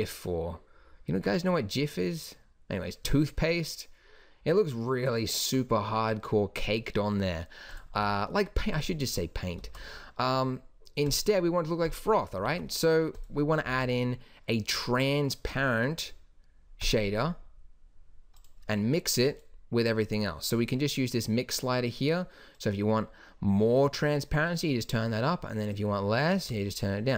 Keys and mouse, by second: 7.9 g, 9.7 shift+a, 12.6 shift+d, 13.7 shift+a, 20.0-27.1 drag.